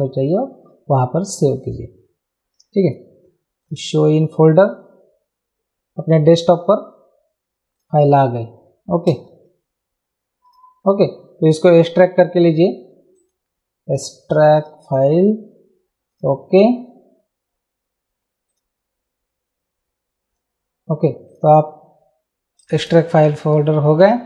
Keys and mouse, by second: 0.2 click, 2.8 click, 7.8 click, 9.3 super+d, 10.5 click, 13.2 right click, 14.6 click, 16.1 click, 21.3 click, 22.6 click.